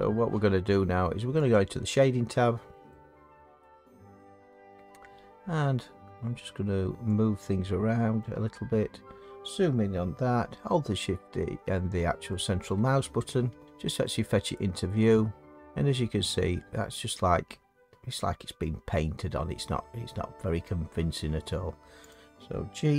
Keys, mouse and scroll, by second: 1.6 click, 3.6 middle click, 5.2 middle click, 5.3 middle click, 8.2 click, 8.8 middle click, 8.8 middle click, 10.3 middle click, 12.3-12.7 shift+middle click, 20.5 middle click, 22.1 click.